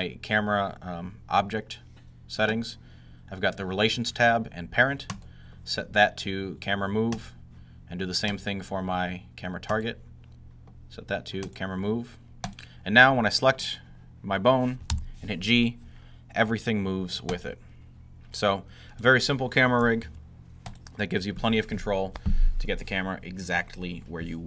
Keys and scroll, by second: 14.8 g, 19.9 g.